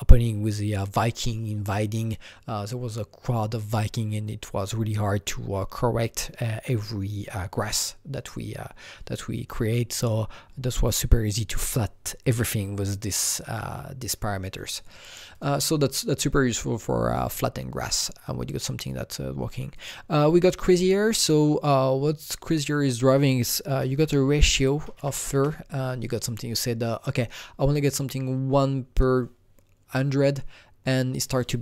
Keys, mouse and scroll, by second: 15.3 click, 18.8 click, 19.7 click, 22.4 click, 22.6 double click, 23.7 KP_0, 23.8 KP_Decimal, 24.7 KP_0, 25.3 KP_Enter, 25.3 KP_1, 29.8 KP_Enter, 29.8 KP_1, 29.8 KP_0, 29.9 click.